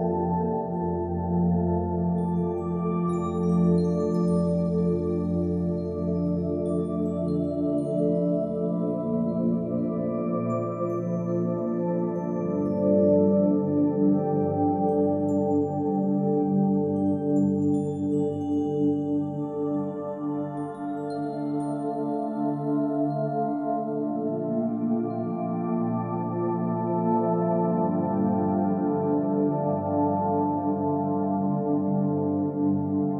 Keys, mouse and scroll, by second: 0.0 scroll down 1, 0.1 scroll down 2, 0.4 middle click, 1.0 scroll up 1, 1.4 shift+click, 1.8 shift+click, 1.9 shift+click, 2.2 shift+click, 2.7 shift+click, 3.7 shift+click, 4.0 shift+middle click, 5.2 ctrl+shift+click, 5.7 ctrl+shift+click, 5.7 shift+middle click, 5.9 scroll up 1, 5.9 middle click, 6.3 shift+click, 7.2 ctrl+shift+click, 7.6 middle click, 8.2 shift+click, 8.2 middle click, 8.7 shift+click, 10.2 shift+click, 10.4 middle click, 10.8 shift+click, 11.0 middle click, 11.4 shift+click, 12.4 middle click, 12.6 shift+click, 12.9 shift+click, 13.8 middle click, 13.9 drag, 14.6 click, 15.0 shift+click, 15.9 click, 16.1 ctrl+s, 16.1 scroll down 2, 16.2 shift+middle drag, 16.4 shift+middle click, 17.7 click, 17.9 middle click, 22.9 shift+middle click, 23.3 shift+d, 23.6-24.7 drag, 25.1 shift+click, 25.6 click, 25.9 ctrl+j, 26.0 shift+middle click, 26.3 click, 26.7 scroll down 2, 26.9 click, 27.5 click, 27.6 a, 27.9 click, 28.1 shift+middle click, 28.3 middle drag, 28.5 middle click, 28.6 click, 28.8 middle click, 29.0-31.8 typing, 29.5 Return, 29.6 click, 29.7 scroll down 4, 29.8 shift+middle click, 31.0-31.8 scroll up 8, 31.1 shift+middle click, 31.2 shift+middle click, 31.6 click, 31.7 shift+middle click, 32.1 scroll down 2, 32.1-32.8 middle drag, 33.0 ctrl+s.